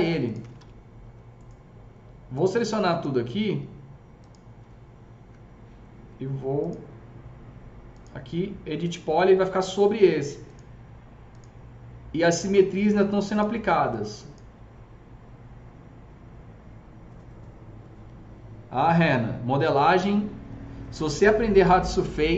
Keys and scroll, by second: 0.3 typing.